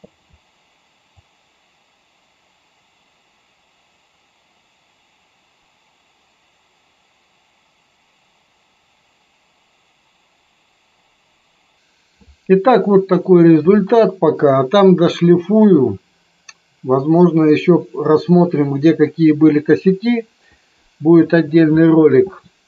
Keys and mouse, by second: 1.1-11.7 drag.